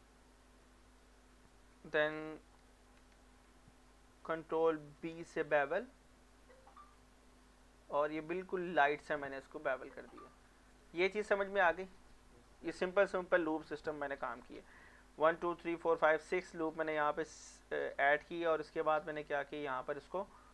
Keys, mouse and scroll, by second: 0.6-5.1 middle drag, 5.0 ctrl+b, 8.7 click, 9.1 middle click, 10.7 click, 18.4 click, 18.6 middle click.